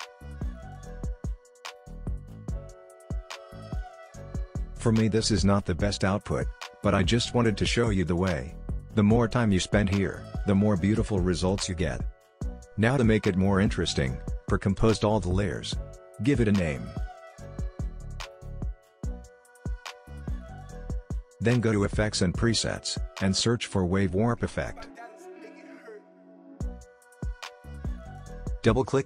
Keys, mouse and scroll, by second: 0.1-4.0 drag, 1.7 typing, 2.8 typing, 4.0 space, 4.7 click, 7.5-8.9 scroll up 1, 8.9-9.5 scroll down 1, 9.5-10.8 scroll up 1, 10.9 click, 12.4 right click, 14.1 click, 16.1-17.7 typing, 18.9 1, 19.1 Return, 20.3 click, 24.7-26.5 typing, 27.8 click.